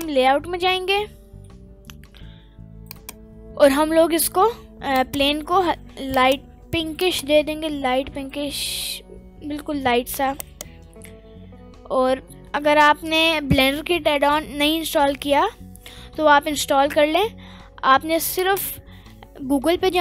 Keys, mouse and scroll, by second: 0.4 scroll down 1, 0.9 middle click, 0.9 scroll down 1, 1.7-2.9 scroll up 1, 2.9 click, 2.9 scroll up 1, 3.9-4.2 scroll up 1, 4.9 click, 6.1 click, 7.0 click, 10.4 right click, 11.0 shift+a.